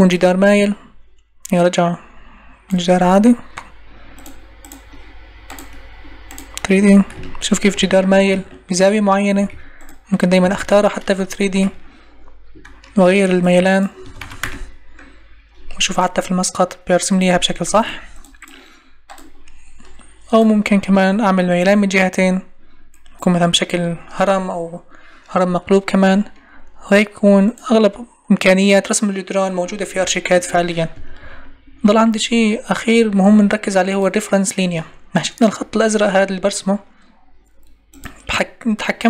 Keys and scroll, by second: 9.3 Escape, 11.1 shift+space, 14.4 Return, 17.7 ctrl+e, 30.9 Escape.